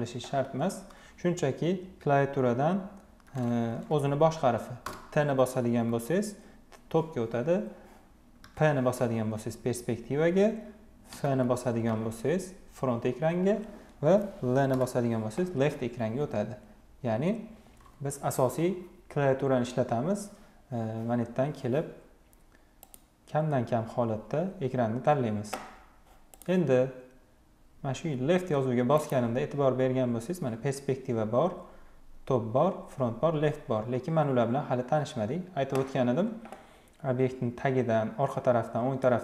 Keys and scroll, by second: 4.7 t, 8.0 p, 10.7 f, 12.1 f, 14.4 l.